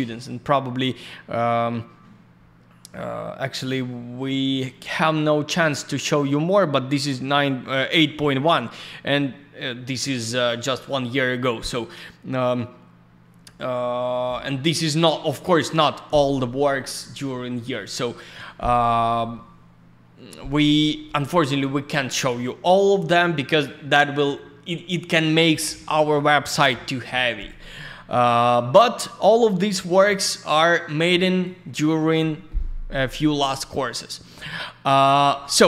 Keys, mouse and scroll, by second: 18.3 click, 18.4 click, 27.5 click, 28.8 click, 30.3 click, 30.5 click, 31.1 click, 32.3-32.8 scroll down 1, 32.8 scroll up 1, 33.7 scroll down 1, 34.3-34.9 scroll down 1.